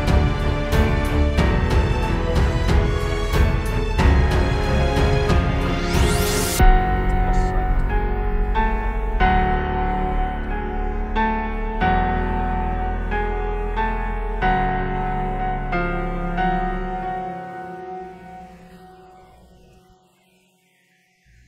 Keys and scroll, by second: 3.6 space, 4.6 space, 5.1 super+z, 5.5 space, 6.1 super+space, 19.1 super+", 19.3 space.